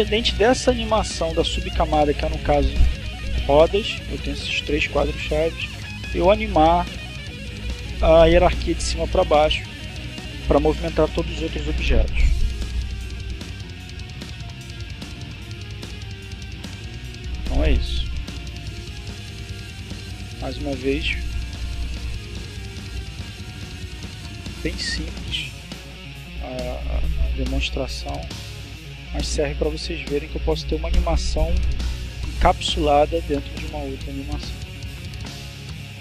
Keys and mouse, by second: 1.1 click, 5.7 click, 12.5 click, 13.4 click, 15.3 click, 20.1 click, 21.0 click.